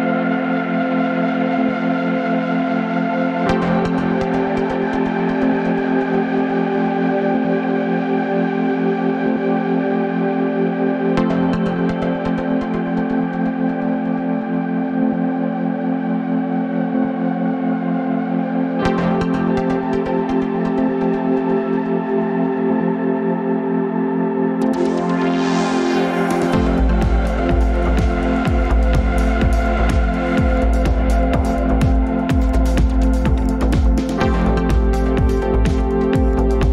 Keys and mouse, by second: 0.7 ctrl+s, 2.9 click, 3.1-14.9 drag, 15.4 click, 16.2 ctrl+s, 17.0 shift+a, 22.9 click, 24.6-25.5 middle drag.